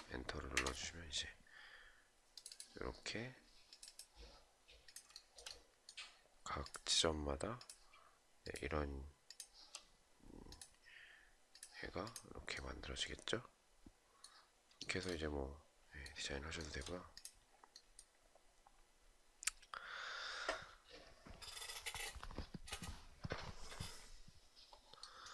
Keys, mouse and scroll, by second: 4.7 shift+right click, 7.1 shift+click, 8.0 shift+click, 8.8 shift+click, 14.3 shift+right click, 16.1 shift+right click.